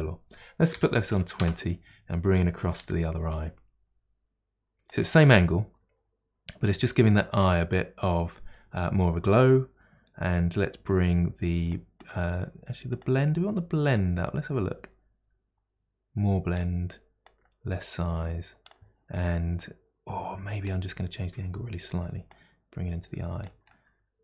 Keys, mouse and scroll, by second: 2.9 g, 11.7-13.1 drag, 14.0-17.0 drag, 17.2-19.6 drag, 19.6-22.4 middle drag, 22.4-23.7 drag, 23.7-24.2 middle drag.